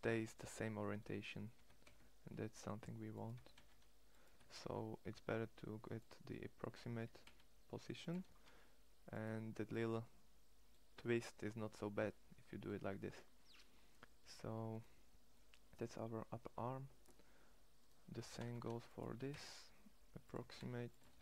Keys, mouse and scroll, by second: 1.2 g, 3.0 g, 4.0 g, 6.0-8.0 middle drag, 6.8 g, 8.0 shift+s, 11.9 middle click, 17.9 g, 18.8 g, 20.1 g, 20.8 shift+s.